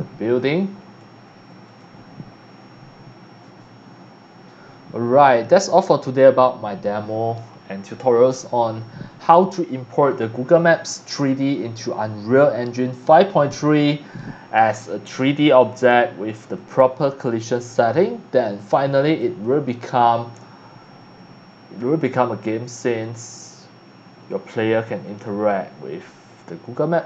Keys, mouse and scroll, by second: 4.2 Escape, 5.8 click, 16.5 click, 18.6 click, 19.2 click.